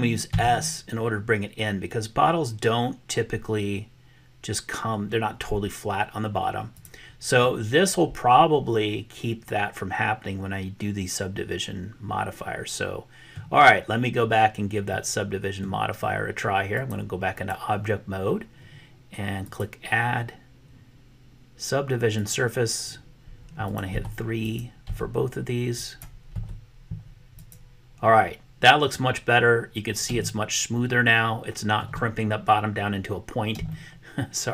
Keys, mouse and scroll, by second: 0.4 s, 7.4-13.4 middle drag, 15.0 middle click, 16.8 click, 19.5-22.5 drag, 23.8 click, 24.9 3, 25.9-27.5 drag, 30.3-31.9 shift+middle drag, 33.7-34.5 shift+middle drag.